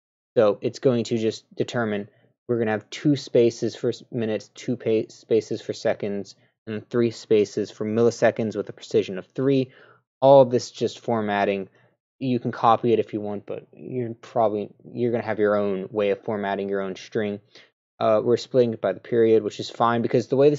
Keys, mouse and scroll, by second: 10.6 scroll down 1.